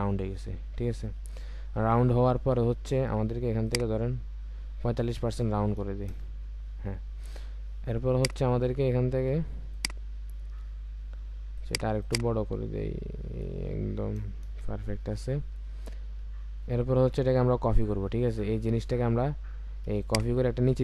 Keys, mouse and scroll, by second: 4.3-6.1 scroll down 1, 6.1 Return, 10.5-11.6 alt+scroll up 1, 12.0 double click, 14.4 Return, 15.2-15.7 alt+scroll down 1.